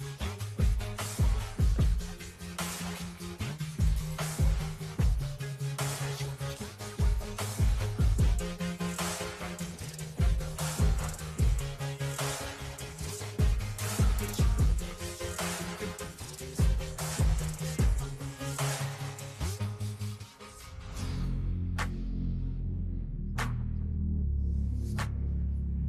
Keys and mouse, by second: 1.7 ctrl+g, 2.4 click, 2.6 click, 3.6-8.0 typing, 11.9 click, 12.6 Right, 13.0 Right, 13.3 Up, 13.6 Up, 14.7 Left, 16.9 click, 19.0 click, 19.6 ctrl+click, 20.9 ctrl+g, 22.1 click, 23.8 click, 24.0 click.